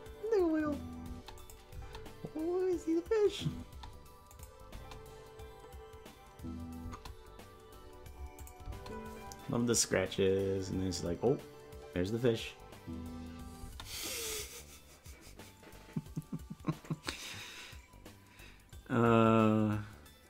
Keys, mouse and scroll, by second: 1.2 space, 1.4 click, 1.7 space, 4.3 click, 4.7 space, 8.4 click, 8.6 space, 14.9 space.